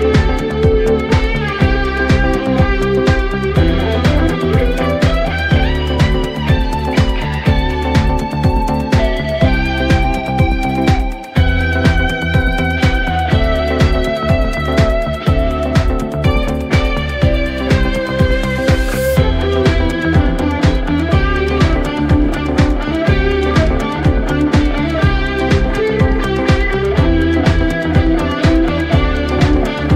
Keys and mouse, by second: 0.4 middle click, 1.8 middle click, 2.1 middle click, 3.2 middle click, 4.1 middle click, 5.0 middle click, 5.9 middle click, 6.5 middle click, 8.8 middle click, 9.3 middle click, 9.5 middle click, 11.4 middle click, 12.3 middle click, 13.3 middle click, 14.2 middle click, 15.9 middle click, 16.8 middle click, 20.6 middle click, 23.6 middle click, 25.0 middle click, 25.2 middle click, 26.0 middle click, 27.7 middle click, 29.8 middle click.